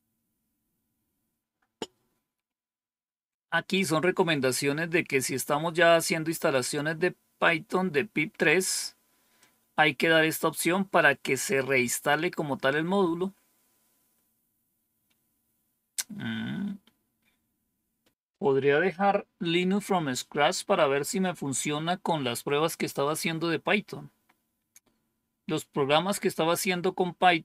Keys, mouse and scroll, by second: 9.3-12.0 drag, 15.7-16.5 scroll down 1.